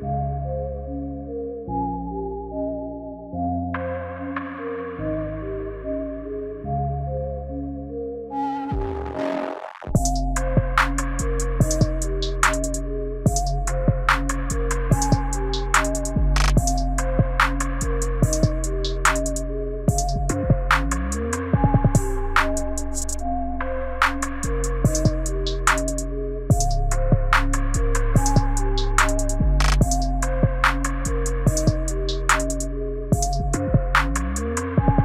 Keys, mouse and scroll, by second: 1.1 click, 2.8 middle click, 3.6 middle click, 5.2 middle click, 5.9 middle click, 6.6 middle click, 7.3 middle click, 8.2 middle click, 8.9 middle click, 10.3-11.5 scroll down 9, 11.5 click, 11.5-12.0 scroll down 1, 21.3-23.4 scroll up 25, 23.4 click, 23.4-25.0 scroll up 2, 25.0 click, 26.3 click, 27.4 click, 28.0 click, 28.6 right click, 31.4 click, 32.4 middle click, 33.5-34.2 scroll down 3, 34.2 middle click, 34.2 scroll down 1.